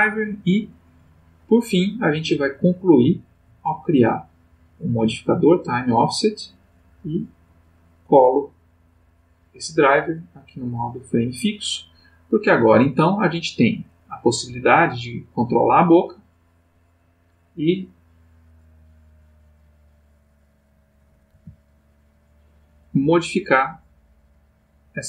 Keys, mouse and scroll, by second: 0.7 click, 2.3 click, 3.0 click, 4.1 click, 5.4 right click, 6.5 click, 7.3 right click, 9.1 click, 9.8 click, 10.7 click, 13.9 click, 14.5 g, 16.1 click, 17.2-21.1 drag, 21.3 g, 24.4 click.